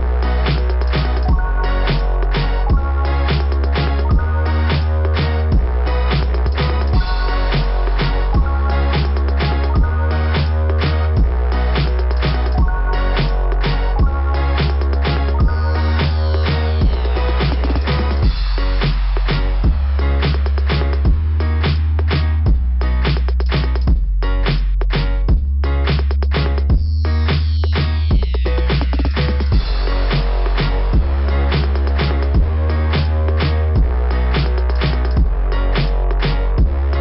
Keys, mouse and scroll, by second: 0.0 click, 0.1 click, 3.6 click, 4.0 click, 6.9 click, 7.4 click, 7.4 click, 8.7 click, 8.9 click, 9.8 click, 10.1 click, 10.8 click, 11.1 click, 12.1 click, 16.1 click, 17.5 click, 19.3 right click, 19.5 right click, 21.1 click, 21.3 click, 23.5 click, 23.6 click, 24.2 click, 24.3 click, 24.5 click, 24.6 click, 24.8 click, 25.0 click, 25.7 scroll down 2, 25.9 scroll up 2, 26.1 scroll down 2, 26.2 scroll up 2, 28.3 click, 28.3 click, 29.0 click, 29.0 click, 29.8 click, 29.9 click, 30.7 click, 30.9 click, 31.0 click, 31.1 click, 31.6 right click, 31.8 right click, 31.9 right click, 33.5 click, 33.6 click, 34.7 click.